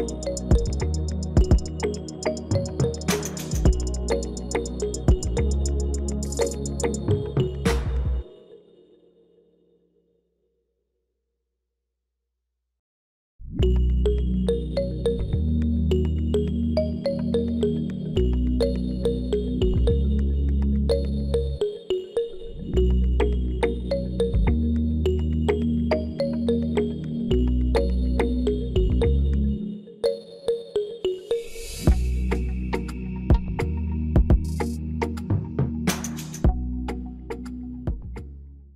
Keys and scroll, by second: 1.9 Return.